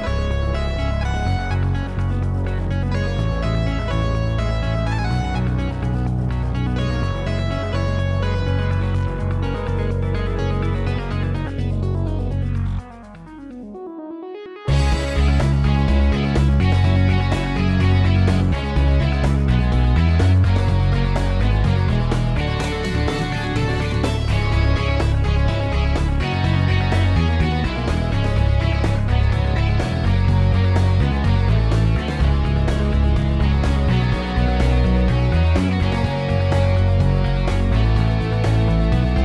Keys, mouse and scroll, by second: 2.6 ctrl+click, 7.4 ctrl+a, 17.4 typing, 21.8 0, 38.2 ..